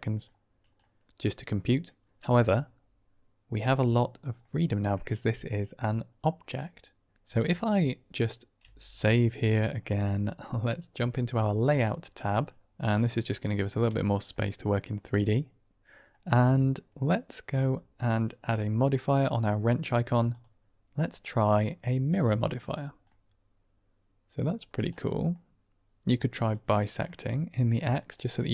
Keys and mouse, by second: 0.7-1.7 middle drag, 4.3 middle drag, 4.5-4.8 drag, 8.5 ctrl+s, 12.6 n, 13.0-13.3 middle drag, 13.9 shift+middle drag, 14.2-16.0 middle drag, 17.6 click, 20.3-22.2 drag, 23.0-24.4 middle drag, 24.9-25.4 middle drag, 25.1 typing, 27.0-27.7 middle drag, 28.1 middle click.